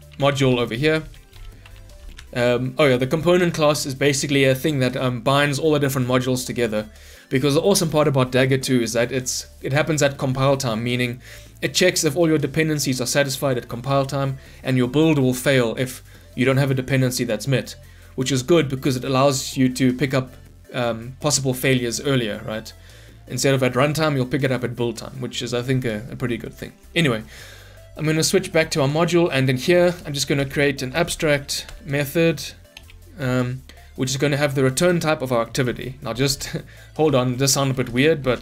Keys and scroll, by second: 0.4 Return, 2.2 ctrl+alt+l, 31.6 Return, 37.9 Return.